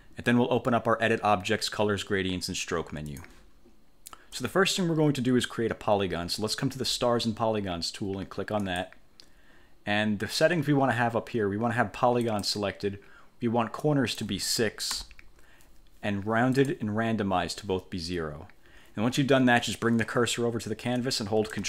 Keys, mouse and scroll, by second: 3.2 click, 8.7 click, 12.3 click, 13.9 click, 15.1 6, 16.7 click.